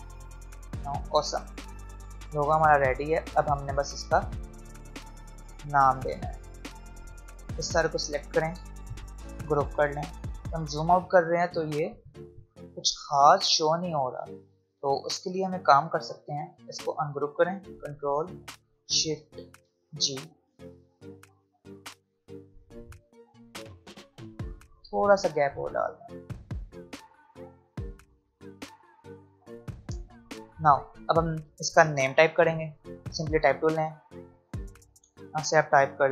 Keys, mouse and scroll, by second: 0.8 v, 1.4 click, 1.9-2.7 alt+scroll down 1, 2.7-3.8 alt+scroll up 1, 5.2-9.3 drag, 9.3 ctrl+g, 10.1 alt+scroll down 1, 11.0-11.5 alt+scroll up 1, 14.5 click, 15.1-15.6 alt+scroll up 1, 16.4 click, 19.7 ctrl+shift+g, 20.6 click, 23.0 shift+click, 24.3 Left, 24.8 click, 27.2 shift+click, 28.3 Up, 28.7 click, 30.0 space, 30.5-30.8 alt+scroll up 1, 32.3 click.